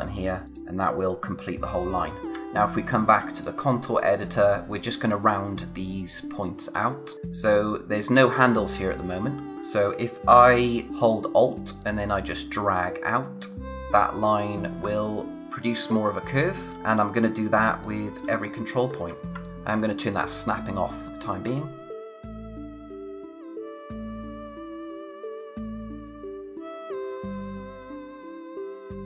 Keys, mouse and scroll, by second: 3.3 click, 4.5-5.0 scroll up 1, 5.0 click, 6.7-9.0 scroll up 1, 9.0 click, 9.5-10.3 scroll down 1, 10.9 alt+Num_Lock, 11.8 alt+click, 15.8 space, 16.7 scroll up 1, 17.6 space, 17.8 click, 18.1 space, 18.4-19.3 scroll up 1, 19.4 alt+click, 20.8-21.4 scroll up 1, 22.1 click, 23.1 scroll down 1, 23.1 space, 23.2 click, 23.2 space, 23.3 scroll up 1, 23.5 click, 24.0 click, 24.6 scroll down 1, 24.6 space, 24.7 click, 24.7 space, 24.8 scroll up 1, 24.9 click, 25.6 space, 25.6 click, 25.7 space, 25.8 alt+click, 26.7 alt+click, 28.0 click.